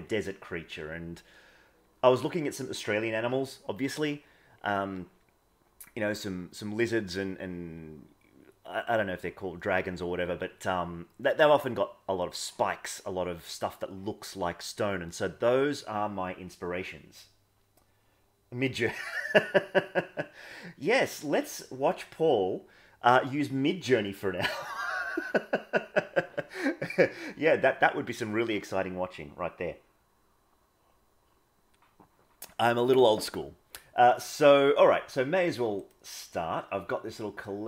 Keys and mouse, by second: 35.7 click.